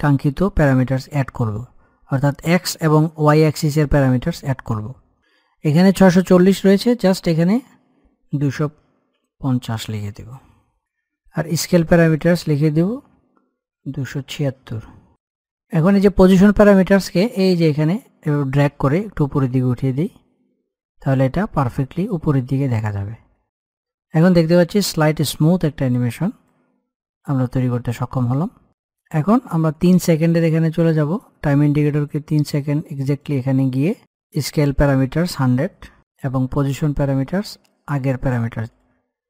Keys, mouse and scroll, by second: 6.3 click, 11.4 click, 15.1 ctrl+z, 16.3 click, 16.5-26.7 drag, 29.3-34.3 drag, 34.5 click, 38.8 click.